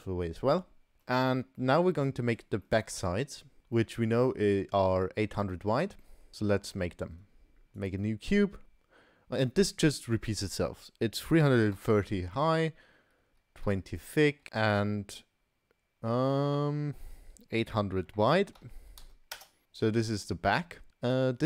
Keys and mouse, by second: 1.0 middle click, 1.6 middle click, 2.7 middle click, 3.8 middle click, 5.5 middle click, 6.0 middle click, 6.4 middle click, 6.8 shift+a, 10.5-14.5 drag, 11.6 3, 18.7 0, 19.6-20.2 middle drag, 20.9 ctrl+z, 21.1-21.4 middle drag.